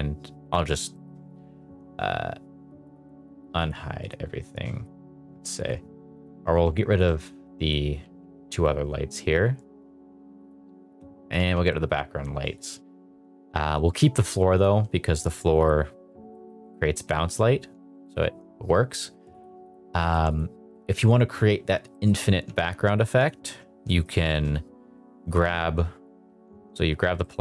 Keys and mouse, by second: 0.0 drag, 0.9 shift+middle drag, 2.6 click, 3.5 click, 4.0 click, 4.7 click, 5.5 click, 6.1 click, 6.8 shift+click, 8.0 x, 10.3 click, 11.3 x, 16.3 middle click, 18.0 shift+middle click, 19.3 click, 19.7 click, 21.9 middle drag, 22.4 Tab, 22.9 2, 23.1 click, 23.8 middle click, 24.1 shift+middle click, 26.5 Tab, 27.1 middle click.